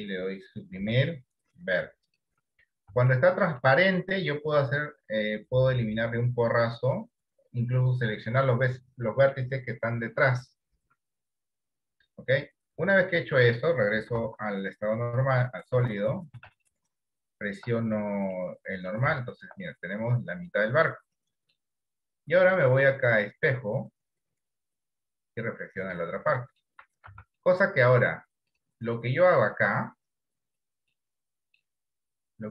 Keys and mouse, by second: 0.8 Delete, 3.2 shift+middle click, 14.3 z, 16.1 Tab, 16.7-17.7 shift+middle drag, 18.4 middle click, 19.3 shift+middle click, 19.8-21.7 middle drag, 22.9-24.8 drag, 25.6-26.7 middle drag, 27.2 Tab, 27.5 middle click, 29.0 middle click, 29.8 click, 31.0 middle click, 32.3-32.5 drag.